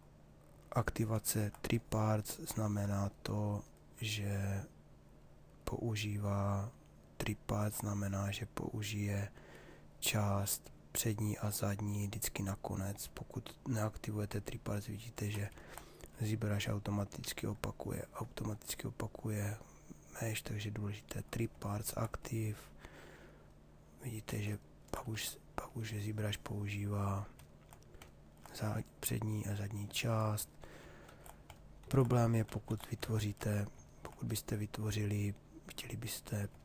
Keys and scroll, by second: 23.9 ctrl+z, 25.1 s, 30.6 ctrl+z.